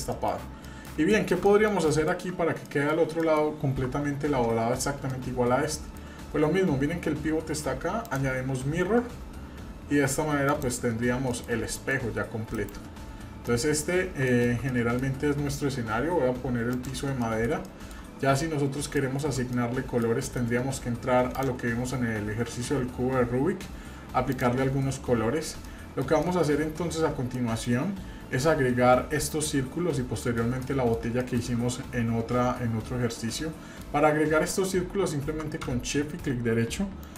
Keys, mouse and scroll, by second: 0.1 middle click, 0.6 middle click, 1.1 shift+middle click, 1.5 middle click, 1.9 shift+middle click, 2.7 middle click, 3.2 middle click, 3.9 Tab, 5.1 middle click, 8.1 click, 11.3 middle click, 11.5 scroll down 1, 11.7 middle drag, 12.6 KP_Divide, 13.0-13.4 scroll down 3, 13.4-13.8 middle drag, 14.0 scroll up 2, 14.3 shift+middle drag, 14.7 middle click, 15.1-16.7 scroll down 1, 16.7 click, 17.2 middle click, 17.7 shift+middle click, 18.5 scroll up 1, 19.1 shift+middle click, 19.5 middle click, 20.2 shift+middle click, 21.3 click, 24.3 click, 25.2-25.7 scroll down 1, 25.7 middle click, 26.2-26.6 shift+middle drag, 26.9 scroll up 1, 27.3-27.8 shift+middle drag, 30.2 shift+middle click, 30.6 middle click, 31.2-31.5 shift+middle drag, 31.8-32.1 scroll up 1, 33.3-33.8 shift+middle drag, 37.0 shift+right click.